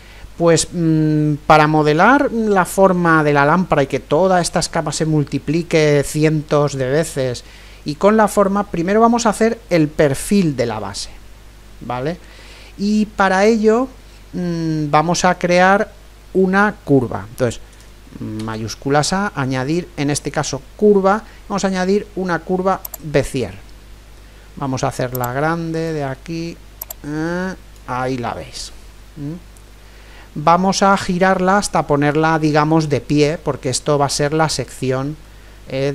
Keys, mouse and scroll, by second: 18.4 shift+a, 25.2-28.7 drag, 28.7-35.9 middle drag.